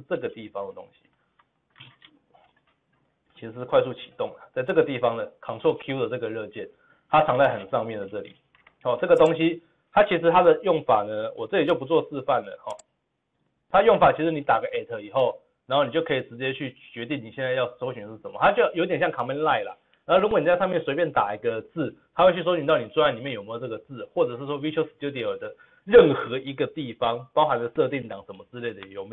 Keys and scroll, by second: 0.5 ctrl+v, 7.2 ctrl+v.